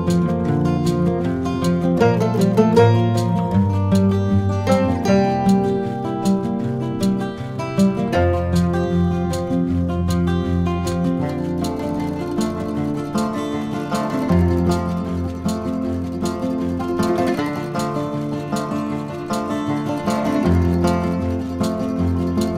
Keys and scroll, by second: 11.5 v, 14.6 super+z, 22.4 shift+super+].